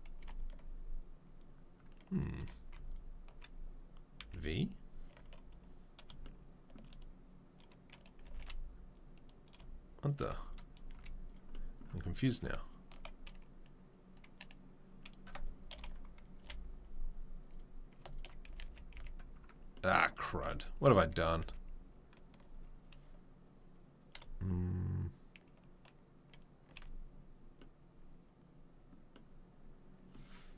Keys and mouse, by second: 0.2 ctrl+l, 2.4 2, 4.2 v, 5.1 1, 8.2 g, 10.2 z, 10.9 z, 15.7 ctrl+l, 16.4 Delete, 18.4 a, 18.6 a, 19.4 a, 20.3 ctrl+z, 20.5 ctrl+z, 21.1 ctrl+z, 21.4 ctrl+z.